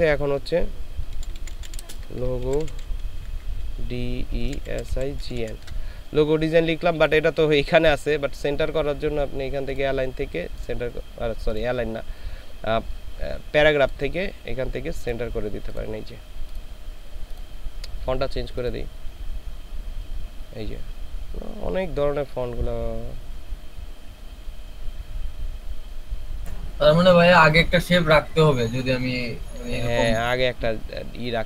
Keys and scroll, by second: 1.1-5.4 typing.